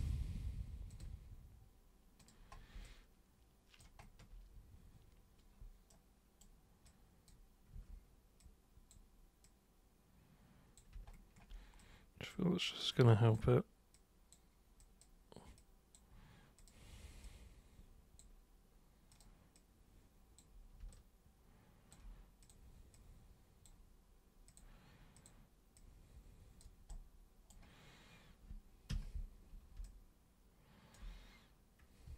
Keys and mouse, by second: 0.8 ctrl+super+click, 2.2 super+click, 2.8 alt+super+click, 5.9 super+right click, 6.8 super+click, 7.7 super+w, 8.3 super+click, 9.4 super+click, 11.8-12.2 super+drag, 12.9 super+click, 13.9 super+click, 14.8 super+drag, 15.6 super+click, 16.6 super+click, 17.2 super+click, 19.1 super+click, 19.5 super+click, 20.9-21.9 alt+super+drag, 22.4 super+click, 22.9 super+click, 24.4 super+click, 25.2 super+click, 25.7-26.6 super+drag, 26.8 super+right click, 28.9 super+3, 29.8-30.9 alt+super+drag, 32.0 super+1.